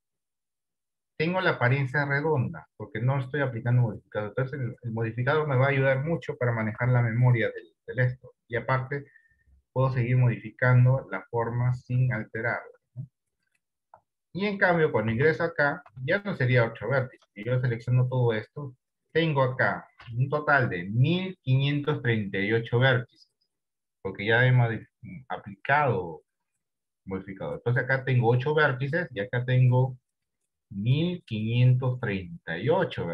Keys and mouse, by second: 1.5-2.9 drag, 7.1-12.0 right drag, 7.1 d, 12.0 d, 13.0 Tab, 14.5 shift+middle click, 15.5 Tab, 16.2 a, 17.0 shift+middle click, 27.8 click, 30.4 click, 31.8 click, 32.4 click.